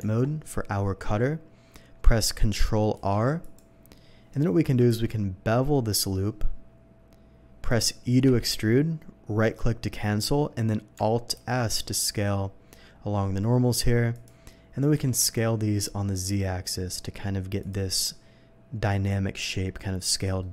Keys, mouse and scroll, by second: 0.0 Tab, 2.9 ctrl+r, 3.4 click, 4.3 right click, 4.9 ctrl+b, 6.5 middle click, 7.7 click, 8.3 e, 9.4 right click, 9.4 e, 14.0 alt+s, 14.1 click, 16.4 z, 17.6 click, 20.4 middle click.